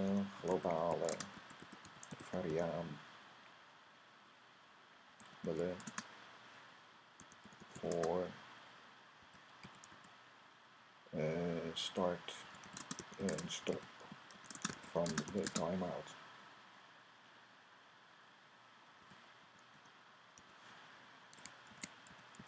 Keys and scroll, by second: 0.0-2.8 typing, 4.8-5.8 typing, 6.8-10.3 typing, 12.1-15.8 typing, 18.7-22.4 typing.